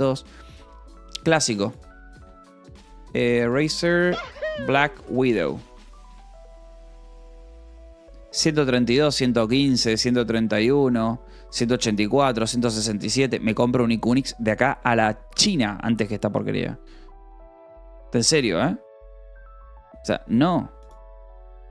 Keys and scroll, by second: 2.5-4.0 typing, 6.8-9.2 typing.